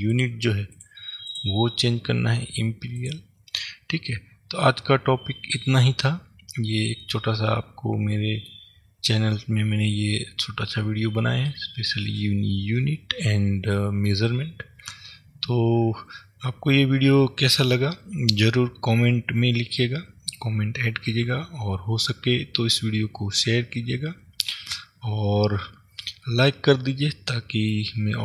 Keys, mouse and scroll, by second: 0.3 click, 1.4-3.8 drag, 3.8-28.2 middle drag.